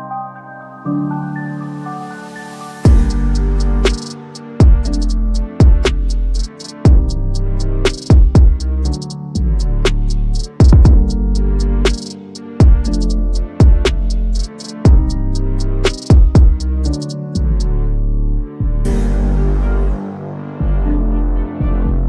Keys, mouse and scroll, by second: 0.7-2.2 drag, 5.4-6.8 drag, 8.8-9.7 drag, 11.7-12.9 drag, 16.4-17.1 drag, 19.8-21.6 drag.